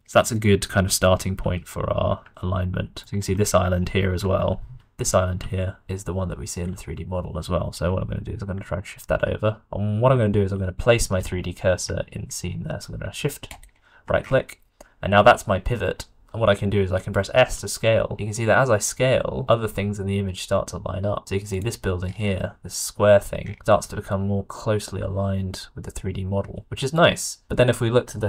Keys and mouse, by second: 1.3 g, 4.1 shift+click, 4.7 d, 5.3-6.3 d, 5.6 click, 7.8 d, 7.8 g, 13.5 shift+middle click, 17.3 s, 23.7 s.